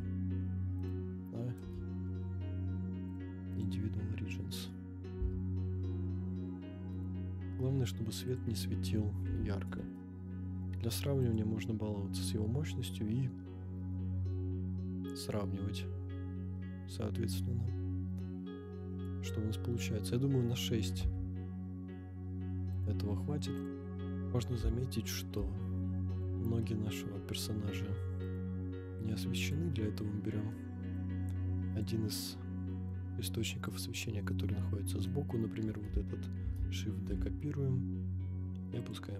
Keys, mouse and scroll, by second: 0.9 click, 1.6 KP_0, 3.1 click, 3.5 click, 4.3 scroll up 1, 4.8 scroll down 1, 5.1 g, 6.9 right click, 8.3-9.9 drag, 11.2-12.3 drag, 12.9-19.1 drag, 20.2 scroll up 2, 20.9 g, 21.0 z, 22.8 click, 23.5 click, 23.8 scroll up 2, 24.8-25.2 shift+middle drag, 26.1 click, 26.7 middle drag, 27.1 scroll down 2, 27.8 scroll down 1, 28.2 click, 29.4 click, 30.5-31.0 middle drag, 31.7 click, 32.7 middle drag, 33.7 drag, 34.3-35.1 middle drag, 36.4 shift+d, 37.0 g, 37.1 z, 38.9 click.